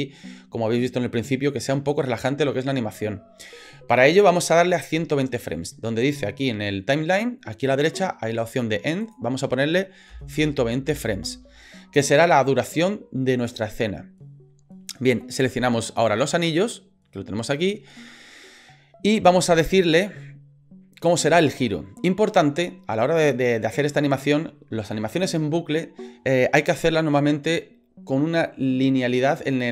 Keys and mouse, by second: 9.1-11.3 drag, 16.1 right click, 18.0 middle click, 19.4 shift+middle click.